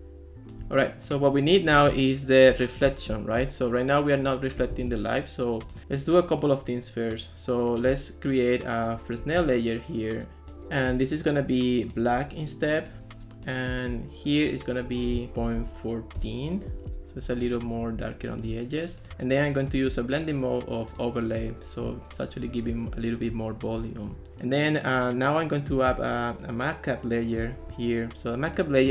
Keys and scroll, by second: 3.1 ctrl+s, 4.7 ctrl+x, 15.5 BackSpace, 15.6 4, 16.2 Return, 18.0 ctrl+s.